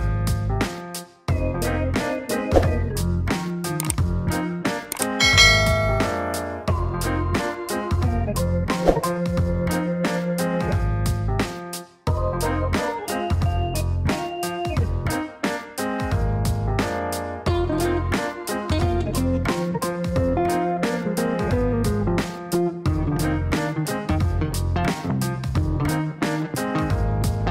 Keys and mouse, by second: 1.9 click, 3.6 middle click, 4.6 middle click, 10.2 middle click, 20.4 click, 23.6 shift+middle click, 25.7 click, 27.1 click.